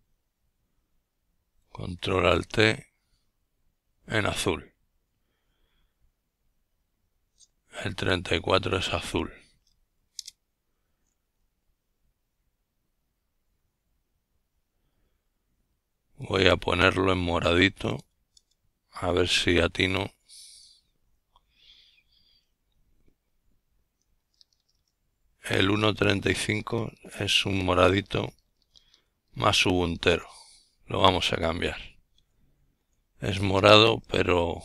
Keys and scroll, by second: 0.3 Down, 0.7 Down, 0.9 Down, 1.0 Down, 1.6 Down, 6.7 Right, 7.3 Right, 10.5 alt+i, 12.2 Delete, 12.6 5, 14.2 Escape, 15.7-16.5 typing, 16.9 Return, 18.1-19.5 typing, 21.9 Up, 22.2 Return, 22.9-24.2 typing, 24.0 Down, 24.6-30.7 Down, 30.7 Right, 30.9 Right, 31.1 Right, 31.3 Right, 31.5 Right, 31.7 Right, 32.3 Right, 32.8 Right, 32.9 Left.